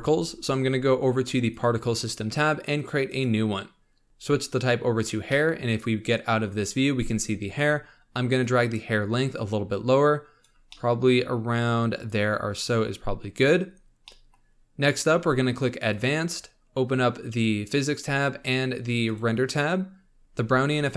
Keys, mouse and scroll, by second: 1.5 click, 3.0-4.0 drag, 5.2-6.5 middle drag, 6.5 scroll down 2, 7.1-8.4 scroll up 1, 8.4-10.7 drag, 10.7-11.1 middle drag, 11.1-11.8 scroll up 2, 12.0-13.9 drag, 13.9 scroll down 1, 14.0-15.8 middle drag, 15.8 click, 17.6-18.2 drag, 18.2 scroll down 4, 19.0-19.8 drag, 19.8-20.2 scroll down 2, 20.2-20.6 scroll up 2.